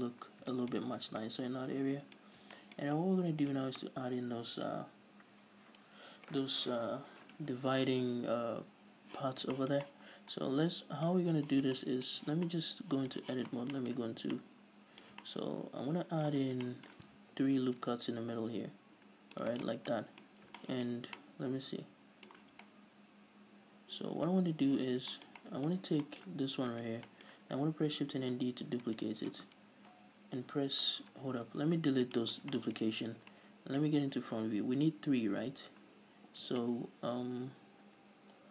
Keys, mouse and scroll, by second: 0.4-1.2 scroll down 4, 1.2 Tab, 2.4 scroll up 2, 9.4 scroll down 2, 11.3-11.6 scroll up 2, 12.3 scroll up 2, 12.3 Tab, 13.4 z, 13.7 scroll down 1, 13.8-19.8 middle drag, 14.1 a, 14.3 scroll down 2, 16.6 scroll down 2, 17.5 ctrl+r, 19.8 right click, 20.1-26.8 middle drag, 20.5 scroll up 2, 22.5 z, 24.5-24.9 scroll up 2, 24.9 z, 25.9-26.2 scroll up 2, 26.8 alt+right click, 27.2-29.1 middle drag, 28.1 shift+d, 29.1 right click, 31.1 scroll down 2, 31.6 x, 32.5 scroll down 1, 32.6-38.5 shift+middle drag, 33.3 a, 35.7-36.8 scroll up 2.